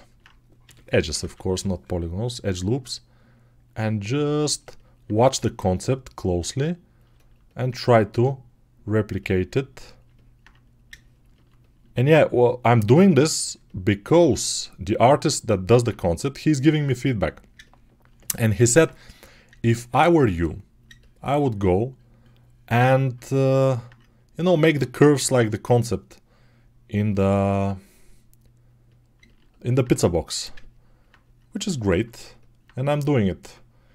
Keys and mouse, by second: 0.5 g, 1.0 ], 1.1 ], 1.8-13.4 drag, 14.9-29.1 alt+drag, 29.4-32.1 alt+right drag, 32.1-33.9 alt+drag, 33.3 Tab.